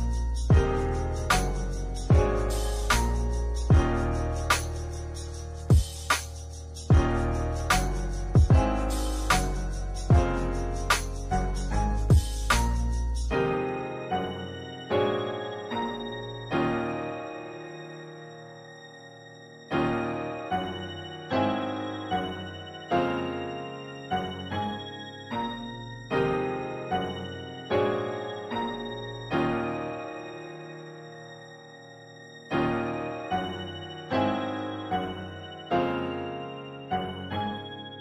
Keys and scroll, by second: 4.2 space, 6.2 space, 10.9 space, 19.3 space.